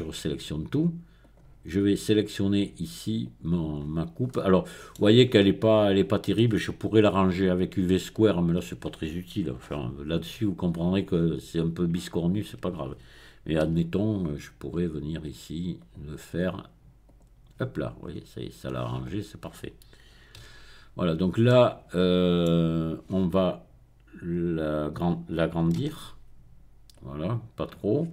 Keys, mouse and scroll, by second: 0.1-1.1 scroll down 1, 1.2 click, 2.3-3.6 drag, 3.8-4.3 scroll up 1, 5.2-6.1 scroll up 2, 13.7 n, 15.7 click, 17.0 click, 18.0-18.9 scroll down 1, 20.4 n, 21.3-21.9 scroll down 1, 21.9-25.7 middle drag, 25.9 s, 26.9 click, 27.3-28.1 middle drag.